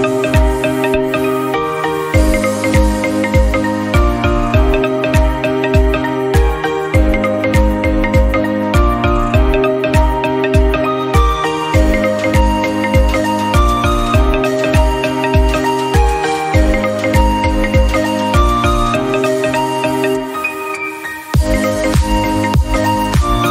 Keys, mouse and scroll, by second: 0.0-3.3 right drag, 3.3-5.3 drag, 5.3 n, 5.8-6.1 scroll up 8, 6.1-8.7 drag, 8.7 e, 10.5 click, 10.6 scroll down 1, 10.7 middle click, 10.8-11.2 scroll up 3, 11.2-12.2 drag, 13.7-15.4 drag, 15.7 click, 15.8-16.2 middle drag, 16.2-18.7 drag, 18.7 middle click, 19.4-21.5 drag, 22.4 middle click, 23.3-23.5 drag.